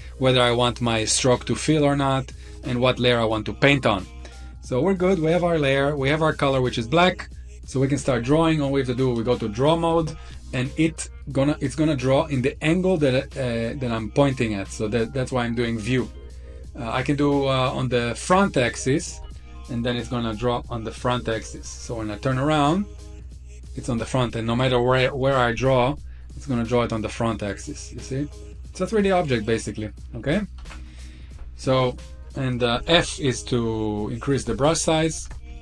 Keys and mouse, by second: 2.2 click, 12.7-18.4 drag, 20.0 click, 22.4 middle click, 24.4 click, 26.7-28.5 middle drag, 28.8 shift+middle click, 29.3 middle click, 29.9 ctrl+z, 30.2 ctrl+z, 32.5 f, 34.1 click, 34.9 ctrl+z, 35.3 f.